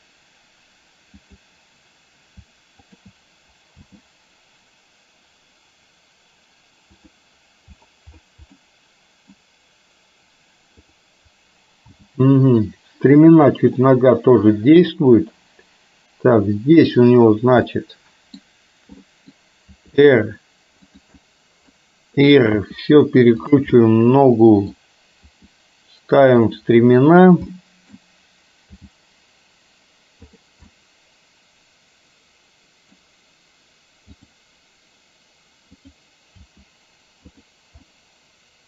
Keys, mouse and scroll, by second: 1.3 click, 2.9 shift+click, 3.9 g, 8.6-9.5 middle drag, 10.9 click, 11.9 g, 13.9-15.0 middle drag, 17.6 middle click, 19.1 click, 19.9 r, 21.3 middle click, 22.6 r, 23.8-24.8 middle drag, 25.4 r, 27.6 middle click, 28.8 g, 30.8-33.1 middle drag, 36.5 r, 38.0-38.6 middle drag.